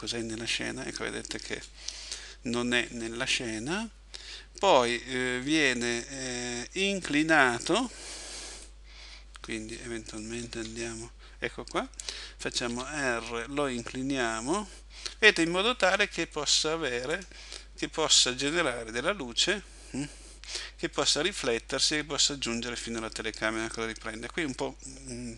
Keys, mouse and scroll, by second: 6.0 middle click, 8.7 middle click, 10.5 KP_1, 12.8 r, 17.3 click.